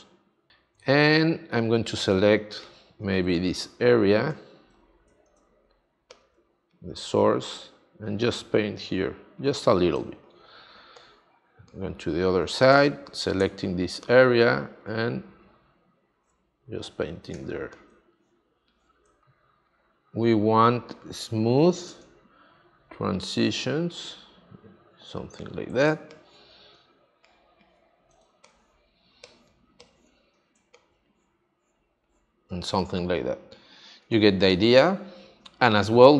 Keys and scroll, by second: 2.3 space, 9.9 space, 21.8 space, 25.8 space, 28.1 space, 32.8 space.